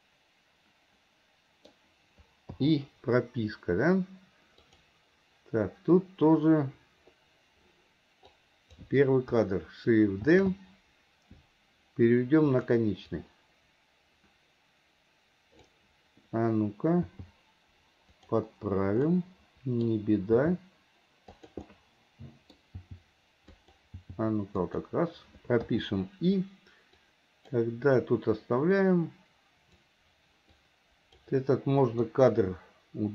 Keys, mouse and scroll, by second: 2.6 i, 4.8 click, 8.4-8.8 drag, 10.4 shift+d, 13.2-15.9 drag, 19.2-20.1 middle drag, 19.2-20.0 scroll up 1, 20.0 scroll up 1, 20.4 g, 21.7-22.9 middle drag, 22.9 g, 25.7 i, 27.1-27.6 drag, 28.9 click, 30.5-31.2 drag.